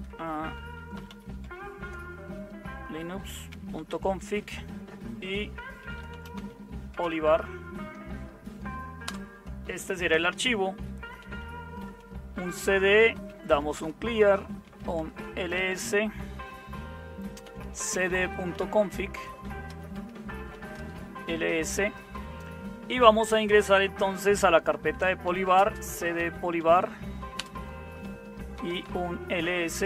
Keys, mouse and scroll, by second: 0.0-1.6 typing, 0.6 Tab, 3.5 Tab, 3.6-4.3 typing, 5.9-6.9 typing, 8.8-9.5 typing, 11.2-15.7 typing, 17.3-19.0 typing, 20.3-21.3 typing, 25.0-29.8 typing.